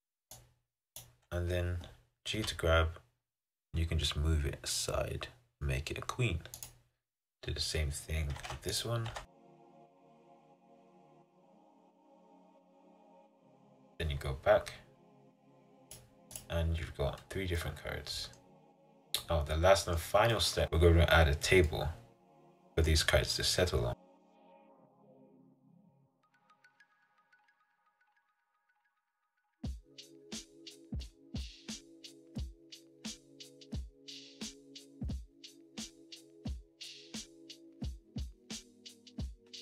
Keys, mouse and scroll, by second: 2.5 g, 8.5 Tab, 8.9 click, 9.2 Tab, 9.4 click, 10.2 g, 12.6 g, 16.0 click, 17.7 middle click, 18.5-18.9 scroll down 3, 19.0-20.9 middle drag, 20.9-21.8 scroll down 5, 21.8-23.2 middle drag, 23.2-23.9 scroll up 4, 23.9 click, 24.0 middle click, 24.8 shift+a, 25.2 scroll down 2, 25.3 s, 26.6 middle click, 26.9-27.3 scroll down 4, 27.3 KP_7, 27.6 scroll down 3, 27.8 Tab, 28.3 click, 28.4 click, 29.1 click, 29.4 Tab, 29.6-31.3 middle drag, 31.7 click, 32.1-33.4 drag, 33.9 Delete, 35.1 click, 35.2 click, 35.7 click, 38.4-39.6 drag.